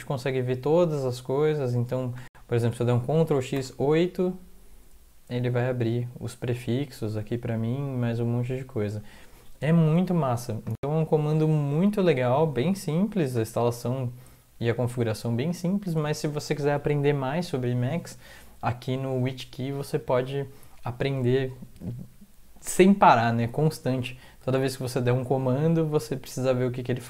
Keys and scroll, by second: 3.1 ctrl+x, 24.5 ctrl+x.